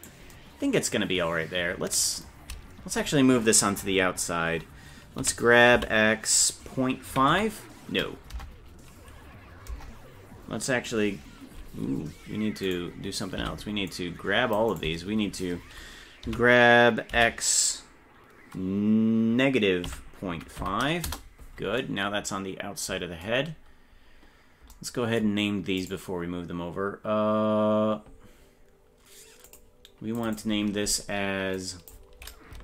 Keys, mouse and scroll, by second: 5.2 g, 13.5 c, 16.3 g, 25.8 right click, 29.5 click, 30.2-32.6 drag.